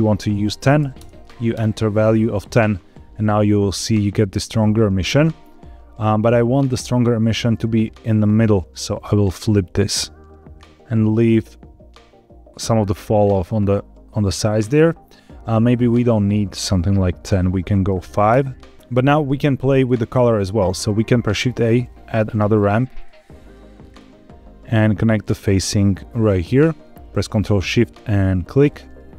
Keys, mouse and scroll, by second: 6.8-8.2 drag, 8.9-10.5 drag, 10.8-14.6 drag, 15.7 click, 16.1 click, 19.2 click, 20.7 shift+a, 25.0-26.2 drag, 28.6 ctrl+shift+click.